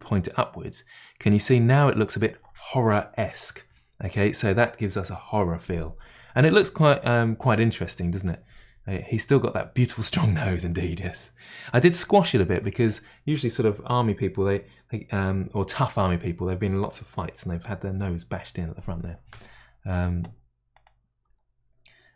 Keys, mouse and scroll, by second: 7.4-22.1 middle drag.